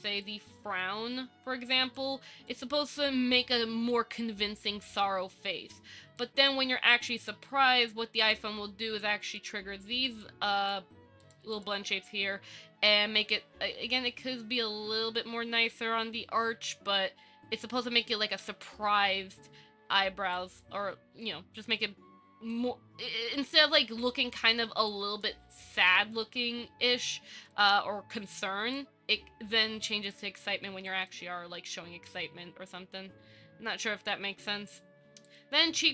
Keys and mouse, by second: 0.5 middle click, 0.6 click, 2.1 click, 3.2 shift+middle click, 6.4-6.7 drag, 7.1 click, 9.3 click, 10.5 click, 20.5-22.7 drag, 24.2 click, 25.1 click, 27.3 click, 28.6 click, 30.4 click, 31.1 click, 31.9 click, 35.5 click.